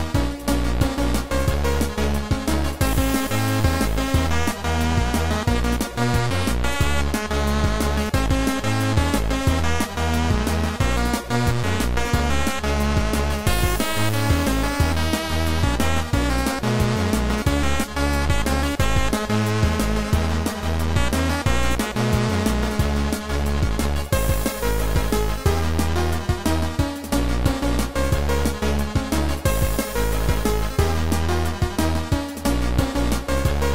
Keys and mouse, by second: 0.2 click, 0.5 click, 1.3 right click, 2.1 right click, 3.3 click, 3.3 right click, 3.7 right click, 4.7 click, 5.9 shift+click, 7.0 click, 7.6 click, 8.2 shift+click, 10.1 click, 10.6 click, 11.5 click, 13.9 click, 14.6 click, 17.5 click, 18.0 click, 20.4 click, 20.9 click, 22.5 click, 23.3 click, 25.2 shift+click, 26.8 click, 29.5 click, 30.7 click, 31.8 Delete, 31.9 End, 32.4 click, 33.0 click.